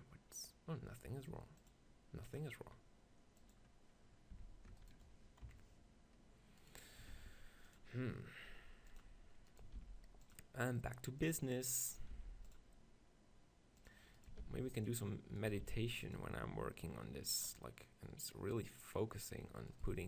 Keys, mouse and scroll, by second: 2.7-4.1 drag, 4.4 Tab, 5.4 KP_7, 7.2 ctrl+r, 9.0 click, 9.8 ctrl+r, 11.9-13.8 drag, 11.9-13.2 right drag, 12.1 ctrl+r, 13.9-17.3 right drag, 14.2-17.3 drag, 14.4 ctrl+r, 15.6 ctrl+r, 17.4-19.3 drag, 19.7-20.0 right drag, 19.9 ctrl+r.